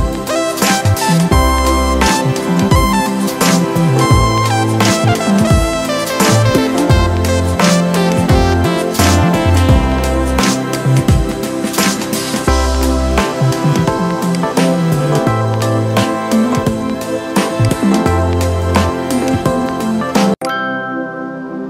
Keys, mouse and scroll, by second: 7.9 ctrl+c, 8.6 ctrl+f, 10.5-14.1 alt+shift+drag, 15.1 alt+scroll up 1, 16.5 alt+scroll down 1, 17.3 space, 17.4 click, 17.8 space.